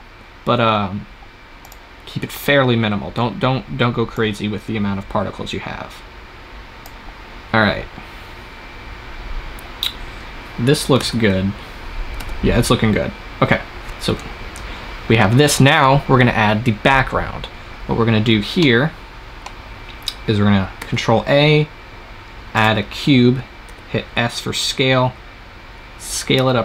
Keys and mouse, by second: 1.5-3.2 drag, 4.2-5.7 middle drag, 5.7 click, 8.6-12.0 middle drag, 10.9 shift+z, 12.6 shift+z, 18.5 middle click, 18.8-20.5 drag, 20.6 shift+a, 23.6 s.